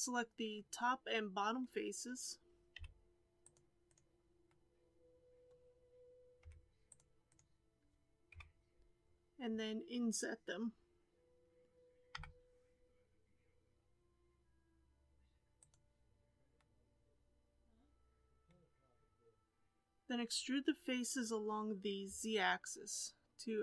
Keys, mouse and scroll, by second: 0.5-2.7 middle drag, 2.7 c, 4.4-6.4 middle drag, 6.4 c, 8.3 KP_7, 12.1 i, 16.5-19.6 middle drag, 23.5 alt+e.